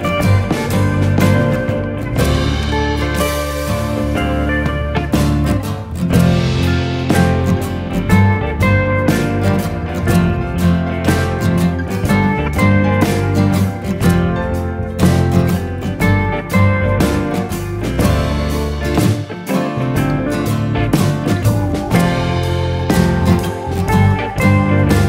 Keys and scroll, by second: 6.3 0, 6.4 ., 6.8 7, 6.9 5, 7.7 Return, 11.1 1, 11.3 ., 11.5 5, 12.1 Return, 13.8 Escape, 17.5 Escape.